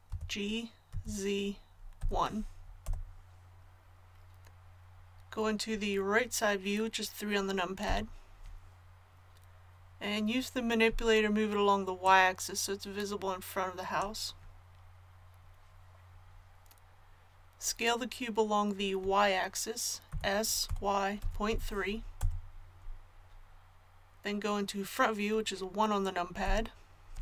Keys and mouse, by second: 0.1 g, 7.9 KP_3, 12.0-13.9 drag, 20.1 s, 26.4 KP_1.